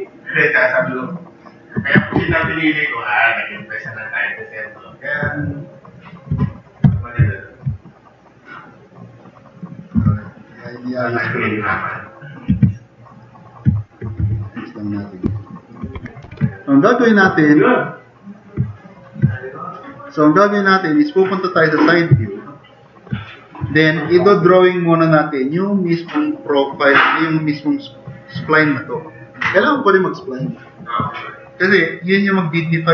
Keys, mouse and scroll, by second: 0.5 click, 0.9 click, 2.1 alt+s, 2.9-5.0 drag, 5.8 click, 6.0 click, 6.3 f, 6.5 click, 6.8 e, 7.2 click, 8.6 click, 10.0 t, 10.2-11.8 drag, 12.5 2, 13.1 click, 13.8 click, 14.2-15.0 drag, 14.2 t, 15.4-15.7 drag, 15.9 4, 16.2 e, 16.4-16.8 drag, 18.8 click, 22.4 click.